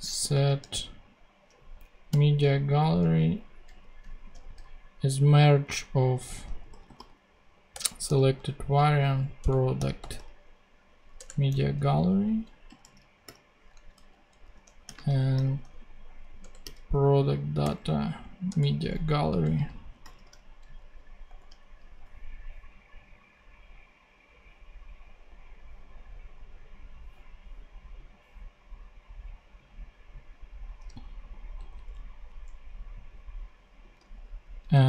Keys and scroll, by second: 0.0-0.8 typing, 1.7 Down, 2.0 Return, 3.6 Left, 4.2 [, 6.3-8.0 typing, 7.6 Return, 9.3 Return, 9.7-10.6 typing, 11.1 Return, 11.5 alt+Left, 12.6 alt+., 12.7 •, 13.6 super+., 13.9 super+Left, 14.5-17.5 typing, 16.3 Return, 18.4 Return, 19.1 alt+Return, 19.2 alt+Left, 19.9 alt+., 20.6 super+., 20.7 super+Right, 21.2 super+;, 22.0 ;, 31.5 Tab, 34.3 super+Left.